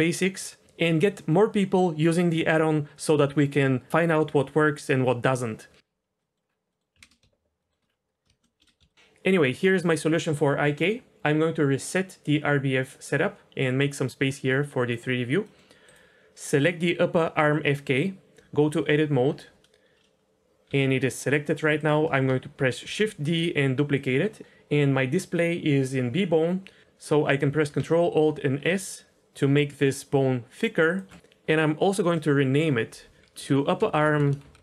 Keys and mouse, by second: 6.2 middle drag, 6.7 middle click, 7.0 ctrl+space, 7.6 shift+drag, 8.6 n, 8.8 shift+drag, 14.3 click, 15.4 middle click, 15.8 click, 18.3 Tab, 20.6 g, 22.8 shift+d, 24.0 shift+d, 28.3 ctrl+alt+s, 32.5 F2, 33.9 BackSpace, 34.0 BackSpace, 34.2 BackSpace, 34.4 BackSpace.